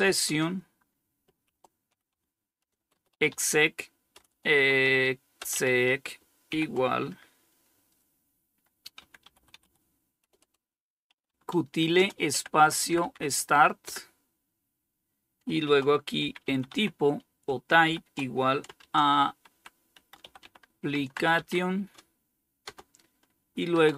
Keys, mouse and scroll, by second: 0.0-6.6 typing, 8.1-13.0 typing, 14.9-21.9 typing, 23.0-23.9 typing.